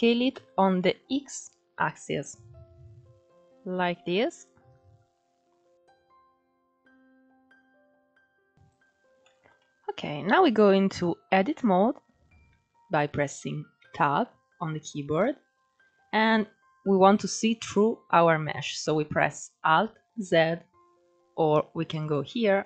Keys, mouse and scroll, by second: 6.5-7.5 drag, 7.5 alt+z, 7.8 alt+z, 8.3-8.9 drag, 8.9-10.0 shift+middle drag, 10.0 click, 10.7 shift+middle drag, 11.0-11.4 scroll up 2, 11.4 click, 13.4 Tab, 14.6 middle click, 15.0-15.6 scroll up 1, 15.6 scroll down 2, 19.9 alt+z, 21.7-22.6 drag.